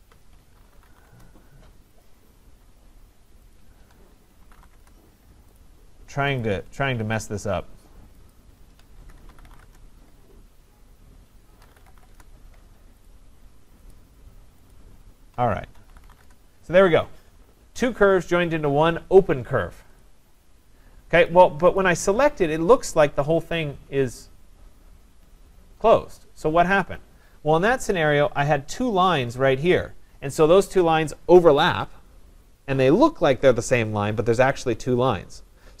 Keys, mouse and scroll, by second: 0.4-1.4 typing, 2.1 shift+click, 3.3-5.2 typing, 3.6 ctrl+click, 5.6 click, 6.4 click, 7.3 shift+click, 8.3 shift+click, 8.8-10.0 typing, 11.4-12.4 typing, 13.1 click, 13.9 click, 14.7 shift+click, 15.5-16.6 typing, 20.0 click, 20.4-21.3 scroll, 21.3 click, 21.8 click, 22.3-23.6 scroll, 23.6-25.0 scroll, 25.0 scroll, 25.2-25.5 scroll down 5, 27.4 scroll up 1, 27.6-28.8 scroll.